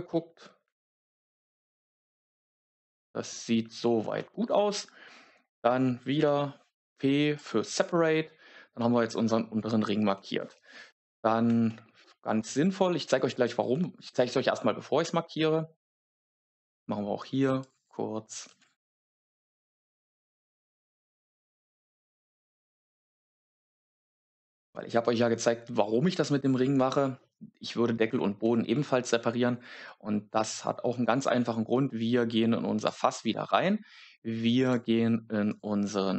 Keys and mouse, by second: 0.7 shift+middle click, 1.5 z, 6.1 p, 10.1 z, 13.6 a, 17.7-24.5 drag, 19.7 shift+Left, 19.9 shift+Left, 20.1 shift+Left, 27.1 middle click, 34.7 click.